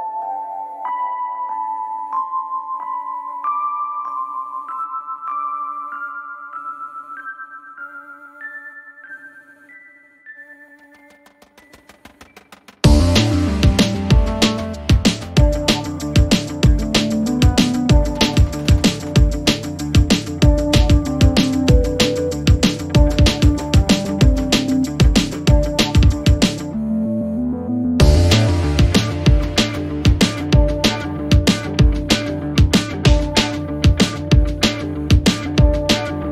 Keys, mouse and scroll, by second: 6.7 q, 8.2 ctrl+j, 11.6 alt+click, 15.4 alt+click, 17.2 click, 21.9 1, 22.9-25.8 drag, 27.4-28.9 drag.